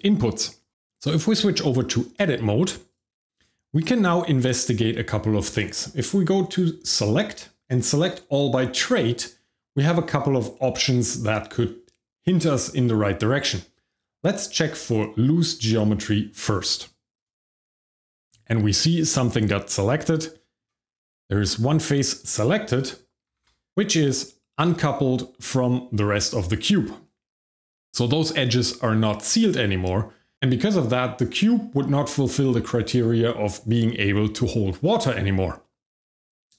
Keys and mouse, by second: 0.2 middle drag, 1.0 Tab, 2.9 click, 6.8-17.2 drag, 19.4-20.5 shift+middle drag, 21.4 shift+middle click, 23.4 g, 23.4 y.